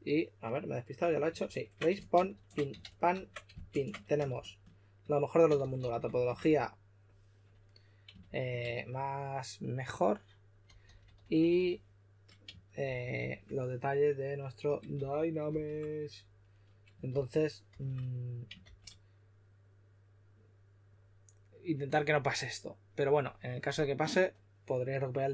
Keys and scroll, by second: 1.3 super+z, 2.1 shift+super+z, 3.0 super+z, 3.6 shift+super+z, 4.2 shift+f, 5.5-6.0 typing, 8.1 shift+f, 10.6-11.5 typing, 12.8-13.1 typing, 14.9-15.4 typing, 17.0-18.5 typing.